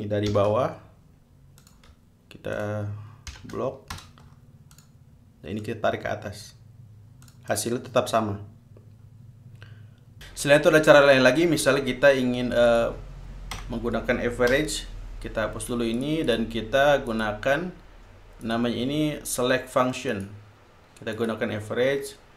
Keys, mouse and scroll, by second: 0.0-0.5 typing, 1.8 click, 2.8 shift+click, 3.5 shift+0, 4.1 shift+Return, 4.9 click, 5.8 click, 7.4-8.0 drag, 13.3 click, 14.2 BackSpace, 15.1 Return, 16.6-17.4 drag, 17.7 click, 19.0 click, 20.8 click, 21.8 click.